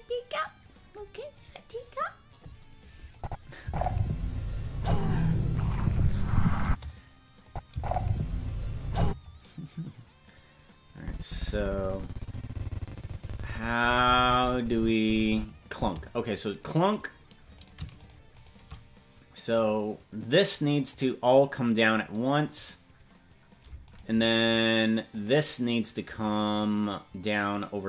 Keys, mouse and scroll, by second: 3.1 click, 3.6 space, 4.6-5.9 scroll up 7, 6.0-6.5 scroll up 1, 6.6 space, 7.5 click, 7.7 space, 9.0 space, 10.2-10.7 scroll down 2, 11.0-16.0 drag, 16.3-17.3 scroll down 2, 17.7-20.9 right drag, 20.9-22.6 drag, 24.0-25.1 right drag, 25.1-26.3 drag.